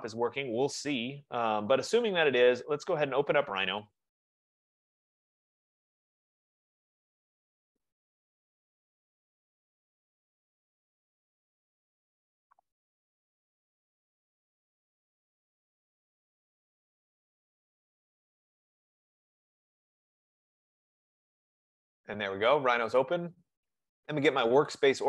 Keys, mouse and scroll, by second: 4.0 click, 4.2 click, 17.3-22.5 drag, 23.9 click.